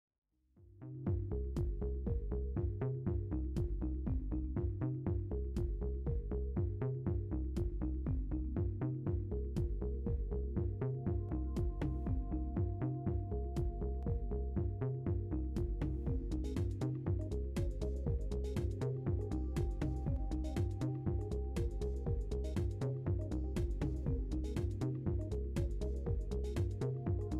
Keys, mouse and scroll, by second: 0.1-0.7 middle drag, 1.6 F6, 2.9 KP_1, 3.4 KP_3, 4.1 scroll up 2, 5.6-8.2 drag, 9.7-11.0 middle drag, 12.0 right click, 13.6-14.4 shift+middle drag, 14.6 shift+F1, 15.1-15.6 middle drag, 16.3 g, 17.2 drag, 17.9-18.5 middle drag, 18.5 scroll down 1, 18.8-19.5 shift+middle drag, 19.7-20.6 shift+middle drag, 20.6 scroll up 2, 23.4-26.2 drag, 26.8 scroll down 2.